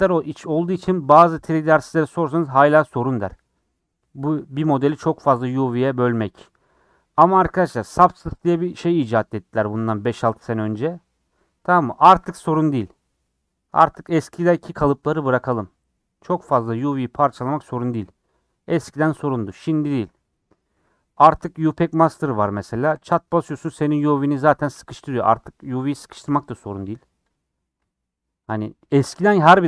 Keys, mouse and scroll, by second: 0.8 ;, 5.3 click, 12.2-15.1 middle drag, 15.1 3, 15.4-20.0 drag, 20.0 n, 23.0-26.3 drag, 26.3 n, 27.3 click.